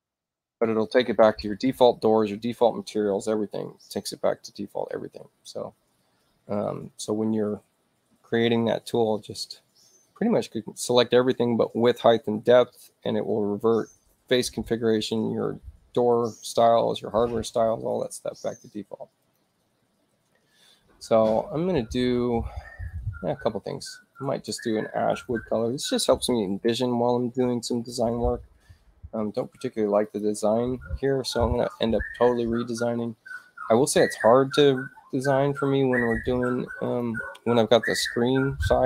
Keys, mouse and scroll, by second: 19.2 click, 24.1 click, 25.0-25.8 typing, 30.0 click, 36.1 click, 36.9 click.